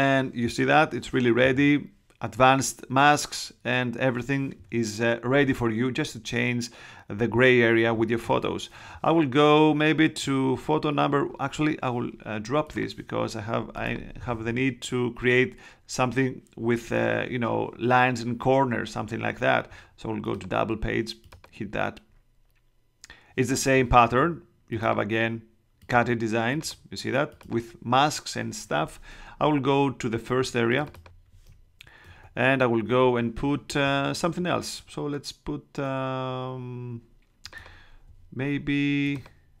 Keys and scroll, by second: 32.0 super+Tab.